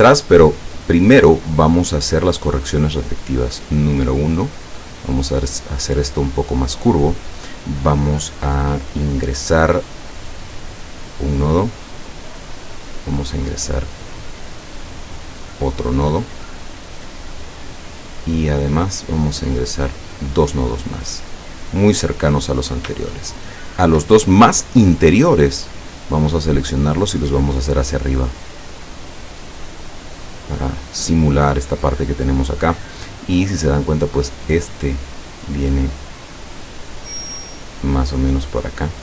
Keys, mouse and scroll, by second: 1.8 click, 3.5-6.5 drag, 10.3 click, 15.1 click, 19.8 click, 21.6 click, 23.7 shift+click, 26.5-30.9 drag, 37.9-39.0 drag.